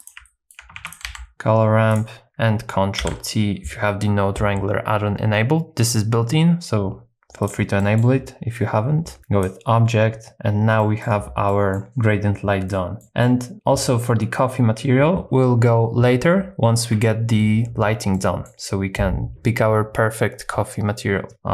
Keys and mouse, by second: 0.3 alt+right click, 0.8 shift+a, 3.0 ctrl+t, 7.4 click, 7.9 middle click, 9.2 click, 10.8 middle click, 11.5 middle click, 12.7 middle click, 18.1 middle click.